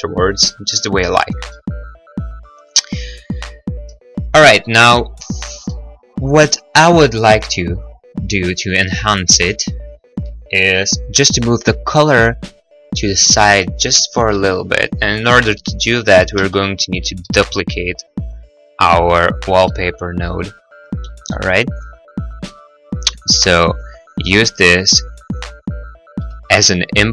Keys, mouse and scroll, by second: 1.8 middle click, 3.1-4.1 scroll, 3.2 middle click, 4.6 middle click, 6.2 middle click, 7.6-8.2 scroll, 14.0 middle click, 14.3 middle click, 16.2 right click, 16.5 shift+d, 17.7 y, 19.5 click, 20.0 middle click, 20.3 middle click, 21.0 g, 21.0 y, 21.7 click, 21.7-23.1 scroll, 21.8 middle click, 21.9 g, 21.9 y, 22.0 middle click, 22.1 middle click, 22.3 middle click, 22.5 middle click, 22.6 click, 22.7 middle click, 22.9 click, 23.1 click, 23.6 middle click, 23.6-25.7 scroll, 23.8 click, 24.0 click, 24.1 middle click, 24.2 click, 24.4 click, 25.7 click.